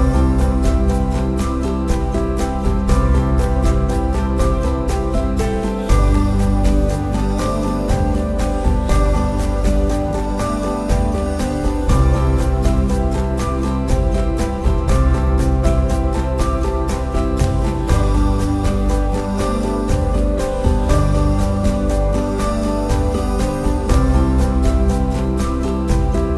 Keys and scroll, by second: 1.0 super+c, 1.2 super+f, 2.9 super+z, 3.3 super+f, 3.7 super+z, 4.7 super+c, 4.8 super+f, 6.4 super+c, 6.5 super+f, 11.7 super+c, 12.1 super+f, 12.3 super+c, 12.4 super+f, 13.4 super+c, 13.5 super+f, 14.1 super+c, 14.3 super+f, 14.5 super+y, 16.8 super+c, 16.9 super+f, 17.6 super+c, 17.6 super+f, 22.5 super+c, 22.9 super+f, 24.8 super+f, 25.5 super+c, 25.6 super+f.